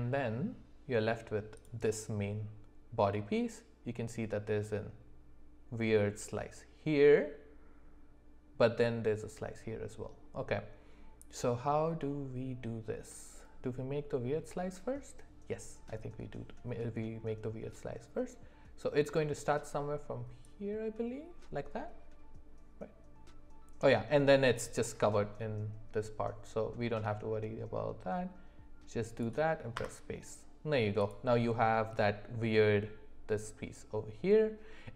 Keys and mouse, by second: 1.5 click, 22.8-30.0 drag, 31.0 click.